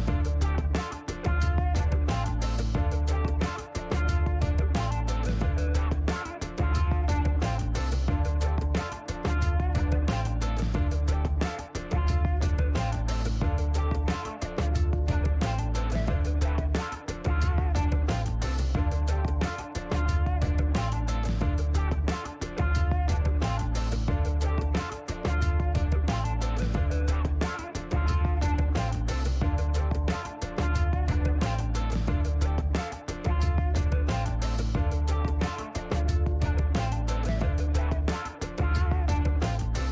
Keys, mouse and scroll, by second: 4.9 click, 8.5 click, 11.5 click, 13.7 shift+right click, 14.9 scroll up 2, 18.0 click, 19.8 scroll down 1, 25.4 click, 26.5 click, 28.5 scroll up 1, 34.5 click, 38.0 click, 38.7 scroll down 1.